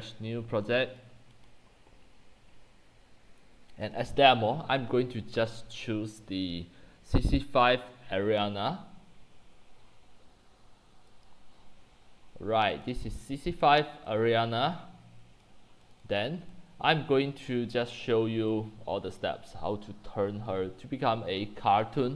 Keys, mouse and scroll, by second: 1.5 click, 3.9 click, 11.3 click, 12.2 middle click, 12.2 scroll down 1, 12.3 scroll down 1, 12.4-13.2 scroll down 1, 12.9 click, 13.1-14.1 middle drag, 13.1 scroll, 13.2 scroll down 1, 13.3 scroll down 1, 13.5 scroll down 1, 13.5 scroll, 13.6-14.1 scroll down 12, 14.1-17.2 typing, 15.9 click, 16.4 click, 17.3 click, 17.4-18.5 middle drag, 17.4-18.3 scroll, 18.9 c, 19.3-22.1 drag.